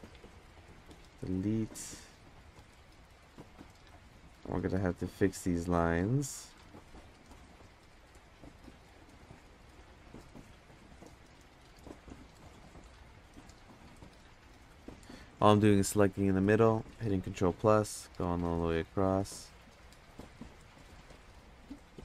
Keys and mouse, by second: 0.0 ctrl+KP_Subtract, 0.6 x, 2.5 click, 3.2 x, 4.2 middle click, 5.1 middle drag, 6.2 middle drag, 6.9 click, 7.8 click, 9.8 click, 11.3 click, 12.1 middle drag, 13.2-13.5 middle drag, 14.9 click, 16.2 ctrl+KP_Add, 16.7 ctrl+KP_Add, 17.2 ctrl+KP_Add, 18.8 ctrl+KP_Add, 19.1 ctrl+KP_Add, 19.5 ctrl+KP_Add, 20.8 ctrl+KP_Add.